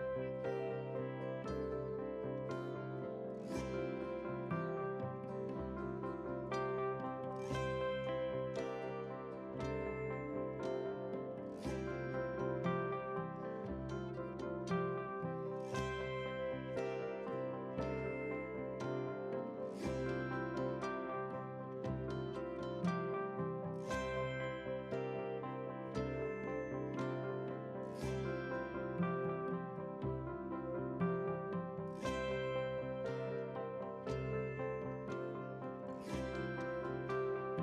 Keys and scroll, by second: 19.3 ctrl+c, 21.3 F8, 22.7 ctrl+v, 23.5 ctrl+space.